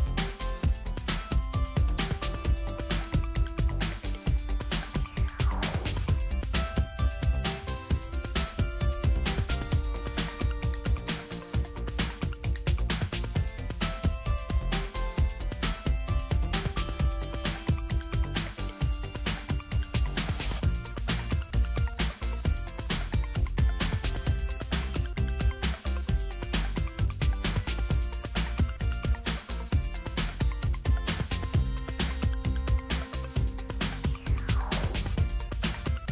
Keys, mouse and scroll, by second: 1.5 click, 3.6-6.1 drag, 7.3 click, 8.7-11.5 drag, 12.3 click, 17.4 click, 20.9 click, 31.1 click, 32.0 click, 34.5 click.